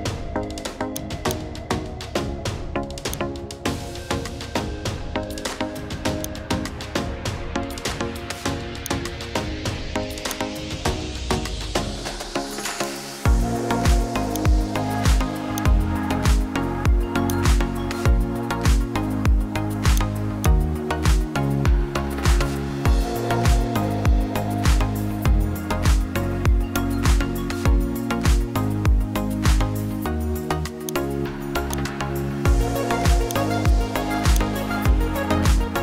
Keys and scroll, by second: 35.4 ctrl+shift+t.